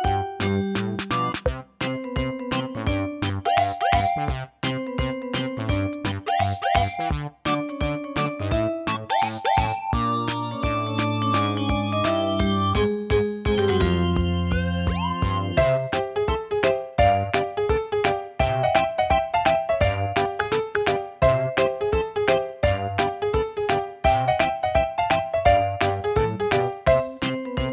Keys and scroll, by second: 12.0 typing, 17.9 super+d, 22.4 d.